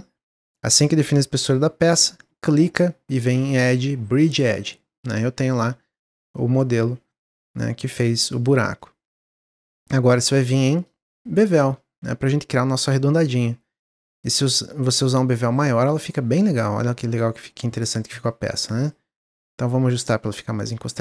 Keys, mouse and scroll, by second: 3.4-4.6 drag, 4.6 middle click, 5.2 Tab, 5.4-8.4 middle drag, 10.7 click, 11.5-13.4 drag, 13.7-15.8 shift+drag, 16.0-18.8 middle drag, 18.8 click, 19.5 click.